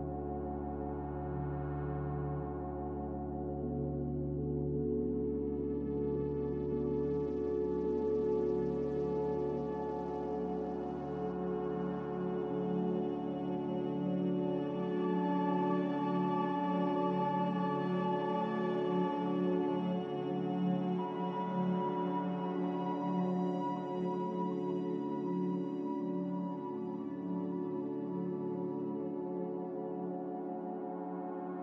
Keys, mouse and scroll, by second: 0.2 ctrl+v, 3.6 ctrl+v, 8.4 ctrl+v, 13.4 ctrl+v, 16.5 ctrl+v, 19.7 ctrl+v, 23.5 ctrl+c, 23.9 ctrl+v.